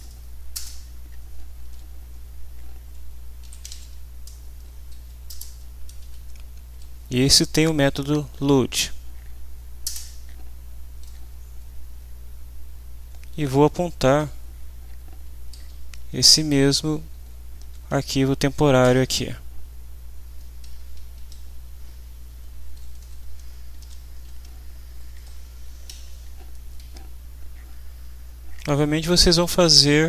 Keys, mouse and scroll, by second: 0.5 Return, 3.1-4.2 typing, 4.9 Down, 5.3 Return, 5.5-6.7 typing, 9.8 Return, 13.0 space, 13.4 Left, 14.6 Up, 16.1 Right, 16.9 shift+End, 17.1 shift+Left, 18.8 ctrl+c, 19.6 Down, 20.9 Up, 22.1 Left, 22.7 Down, 23.0 Left, 23.8 ctrl+v, 24.7 Left, 25.3 Up, 25.9 Down, 26.8 End, 28.5 Up.